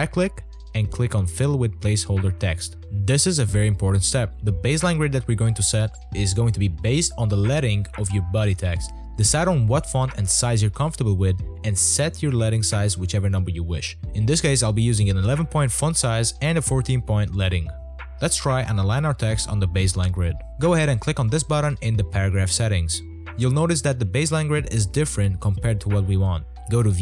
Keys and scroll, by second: 4.5-6.7 typing, 13.9 a.